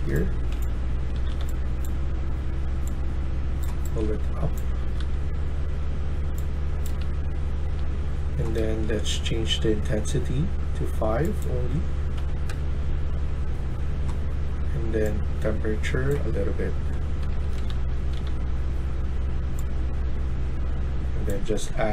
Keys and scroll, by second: 0.0-1.7 typing, 3.3-5.3 typing, 12.1 5, 12.4 Return, 16.9-18.6 typing.